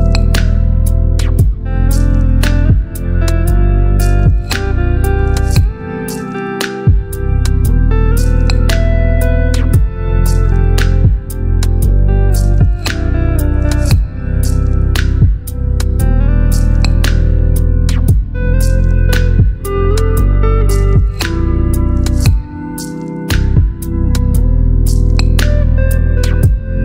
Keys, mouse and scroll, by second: 2.5-3.9 shift+drag, 4.8 ctrl+t, 6.1-13.4 drag, 19.2-22.0 shift+drag, 25.3-26.8 shift+drag.